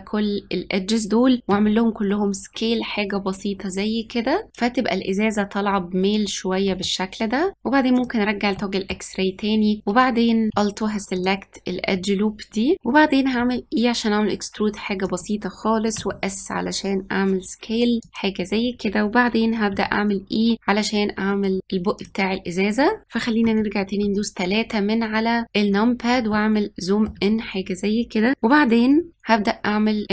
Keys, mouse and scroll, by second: 1.4 s, 6.7-7.9 shift+middle drag, 7.9 click, 8.5 middle click, 9.2-11.1 scroll up 3, 11.1 alt+click, 13.3 e, 15.9 s, 19.7 e, 23.4 KP_3, 25.4-26.2 scroll up 4, 26.2-27.3 shift+middle drag, 27.3-29.1 scroll down 1.